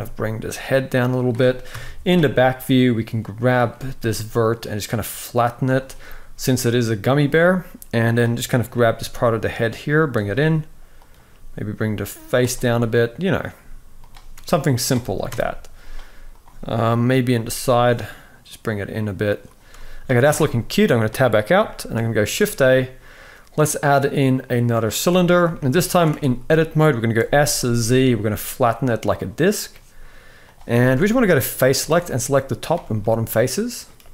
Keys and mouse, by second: 1.4 KP_3, 2.2 click, 3.4 g, 7.7 click, 8.4 g, 10.7 click, 11.0 g, 13.0 click, 13.2 g, 15.0 KP_4, 16.0 click, 16.0 KP_1, 17.1 g, 20.0 Tab, 21.4 shift+middle click, 22.1 shift+a, 25.2 shift+middle drag, 25.8 Tab, 26.9 s, 30.4 z, 32.7 middle click.